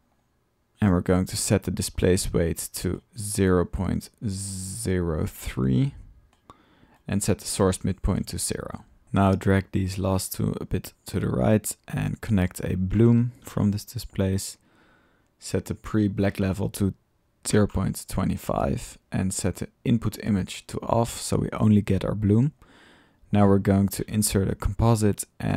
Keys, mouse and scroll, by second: 1.8-2.9 middle drag, 4.9 typing, 9.0 typing, 9.1 alt+click, 10.2 click, 11.1 drag, 11.5-11.8 drag, 11.8 middle click, 12.4-12.9 drag, 12.9 Tab, 13.0 click, 13.1 typing, 14.1 click, 15.8-17.8 drag, 19.8-20.8 drag, 20.8 typing, 20.9-22.6 middle drag, 22.6-22.9 drag, 23.4 right click, 23.7 click, 23.9 c, 24.6 drag.